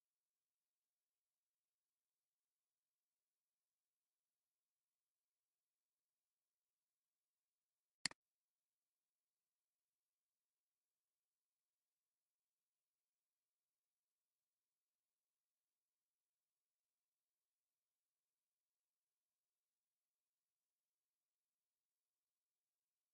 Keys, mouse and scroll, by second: 0.0-1.1 typing, 2.5 scroll, 2.6 scroll down 1, 3.5 scroll up 1, 4.1 scroll down 1, 4.9 scroll up 1, 5.7 scroll down 1.